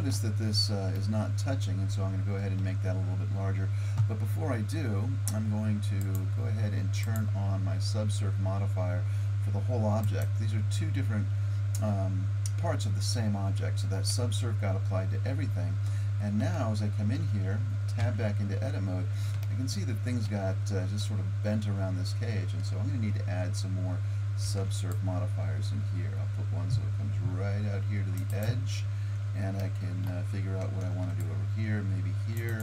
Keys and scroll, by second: 18.0 Tab, 24.4 ctrl+r, 30.8 ctrl+r.